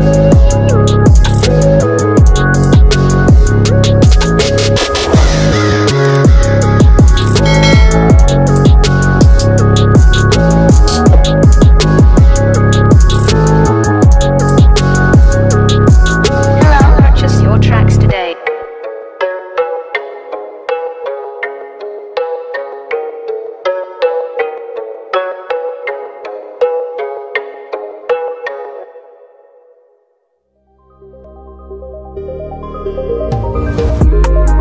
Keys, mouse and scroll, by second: 0.4 click, 1.2 click, 2.1 click, 7.3 ctrl+z, 7.8 click, 9.9 ctrl+t, 10.1-11.7 drag, 15.8-21.9 drag, 21.9 click, 22.6-24.3 drag, 24.7-27.1 drag, 27.8 click, 28.9 click, 29.3 scroll down 1, 29.8 click, 30.4-30.9 scroll down 1, 30.9 click, 31.5 scroll down 1, 31.8 click, 32.3 scroll up 1.